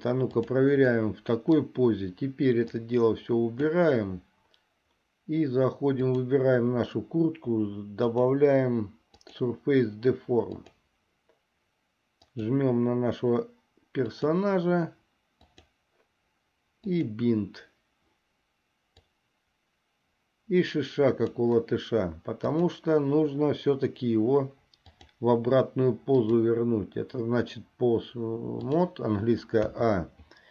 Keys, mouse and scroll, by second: 0.0 click, 1.2 middle click, 2.9-4.0 drag, 6.2 click, 8.1 click, 9.3-11.0 drag, 12.4 click, 17.1 click, 19.2-21.6 drag, 22.6 click, 25.1 click, 26.4-29.0 drag.